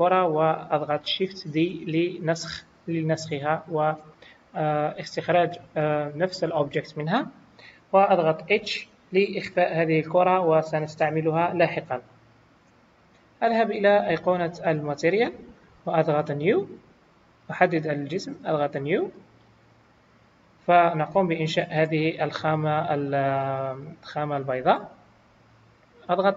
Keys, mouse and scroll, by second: 1.9 shift+d, 4.6 scroll down 1, 8.4 h, 14.6 click, 17.2 click.